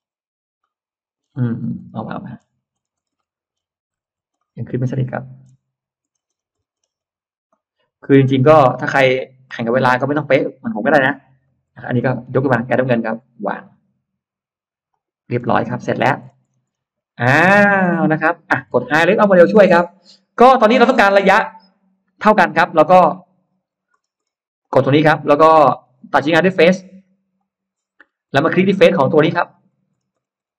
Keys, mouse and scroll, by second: 0.5 middle click, 1.0 scroll down 1, 1.4 scroll up 2, 1.9 middle click, 2.3 scroll down 2, 2.7 scroll up 2, 3.0 middle click, 3.9 ctrl+z, 4.2-5.2 middle drag, 5.3 scroll down 1, 5.9 scroll up 2, 6.4-6.9 scroll up 2, 7.3 scroll up 2, 7.5-9.3 middle drag, 10.3 click, 11.4 Up, 11.6 middle click, 12.0-12.3 scroll down 1, 13.0-13.7 scroll up 2, 14.8 click, 15.1-16.8 scroll down 4, 15.3 space, 17.2 middle click, 17.4-17.7 scroll down 1, 18.9-19.7 scroll up 2, 18.9 n, 19.9-20.3 scroll down 1, 20.4 middle click, 22.7-24.4 scroll up 10, 24.5 click, 25.4-25.7 scroll down 2, 27.2 click, 27.9-28.8 scroll down 2, 28.2 middle click, 29.2-30.5 scroll up 7.